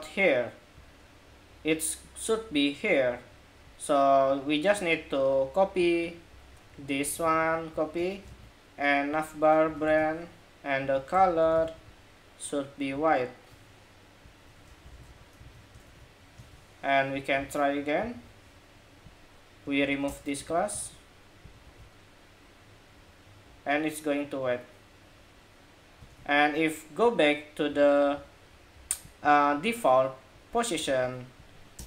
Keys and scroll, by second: 6.9 super+c, 8.0 super+v, 15.1 super+s, 15.6 super+Tab, 16.2 super+Tab, 20.2 super+s, 20.6 super+Tab, 21.4 super+r, 22.4 super+r, 25.9 super+Tab, 30.5 super+c, 31.7 super+v.